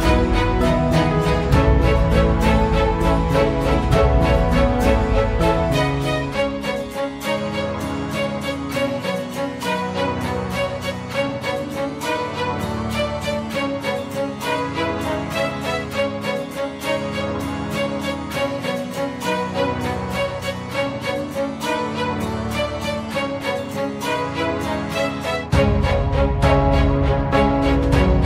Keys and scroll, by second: 7.9 Escape, 21.8 Escape.